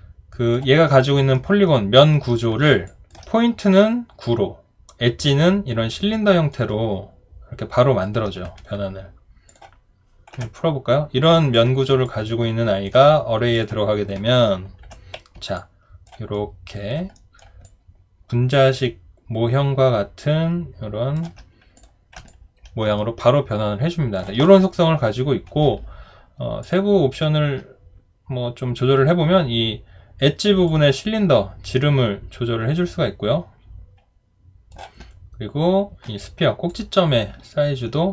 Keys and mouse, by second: 0.9 alt+right click, 1.3 alt+middle click, 2.9 alt+click, 6.5 alt+right click, 12.0 alt+click, 15.6 alt+click, 16.3 alt+right click, 17.2 alt+middle click, 17.6 alt+click, 22.3 alt+click.